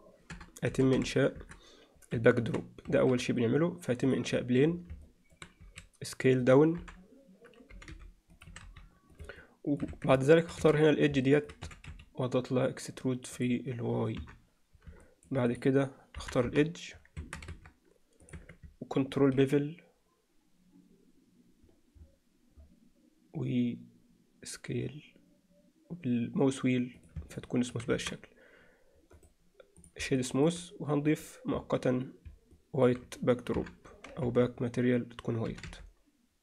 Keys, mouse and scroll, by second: 2.5 shift+c, 2.9 shift+a, 5.1 middle drag, 5.7 s, 6.8 KP_7, 7.7 g, 8.5 s, 9.4-9.8 alt+middle drag, 9.9 Tab, 10.3 alt+middle click, 10.6 2, 10.8 click, 11.3 middle click, 11.7 e, 14.2 KP_3, 15.1 middle click, 15.5 click, 16.2 KP_1, 16.5 KP_3, 17.2 Tab, 17.5 ctrl+a, 18.4 Tab, 19.2 ctrl+b, 27.4 alt+middle click, 27.9 Tab, 30.2 alt+middle drag, 31.2 click, 32.5-32.9 middle drag, 33.6 KP_3, 34.3 z, 35.5 g.